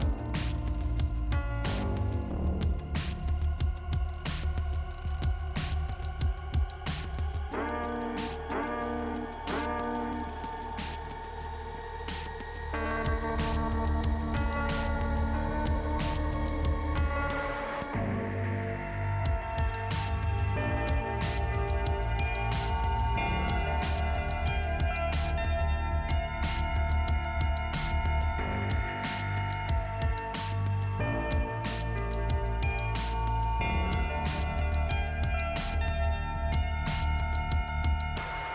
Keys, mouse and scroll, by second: 0.3 click, 5.4 scroll down 2, 6.0 click, 7.2 click, 7.6 click, 12.0-12.6 scroll up 2, 12.6 click, 13.1 scroll down 2, 13.4 click, 15.3-16.3 scroll down 2, 16.3 ', 16.5-17.6 scroll up 1, 17.6 scroll up 1, 17.9 click, 18.7 click, 19.7 click, 27.1 click, 27.5 right click, 27.7 double right click, 28.1 typing, 29.3 click, 30.0 click, 32.5 p, 35.6-36.8 scroll up 1, 36.8 scroll up 1, 36.8 click, 37.5 right click, 38.2 click.